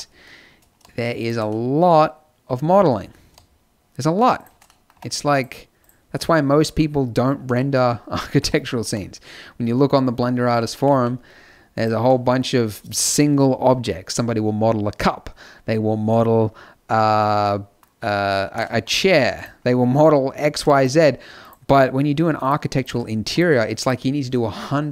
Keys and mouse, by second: 1.5 i, 2.4 e, 4.6 middle click, 4.9 Tab, 6.3 middle click, 7.4 g, 10.7 g, 12.0-17.1 middle drag, 19.3 right click, 19.8 middle click, 23.2 x.